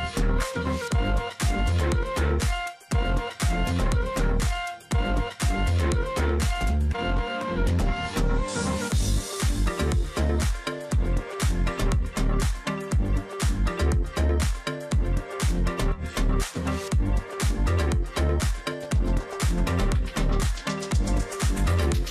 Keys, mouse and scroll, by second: 0.3 ctrl+click, 0.9 ctrl+z, 1.4 ctrl+click, 2.4 ctrl+click, 3.1 ctrl+click, 4.5 ctrl+click, 5.8 ctrl+click, 6.0 shift+x, 6.5 ctrl+click, 7.7 alt+scroll down 1, 8.0 space, 8.9 ctrl+alt+click, 12.0 ctrl+click, 13.7 space, 14.0 ctrl+z, 15.0 space, 16.5 space, 17.2 ctrl+click, 20.3 ctrl+click, 20.6 space, 20.8 alt+scroll up 1, 21.3 space.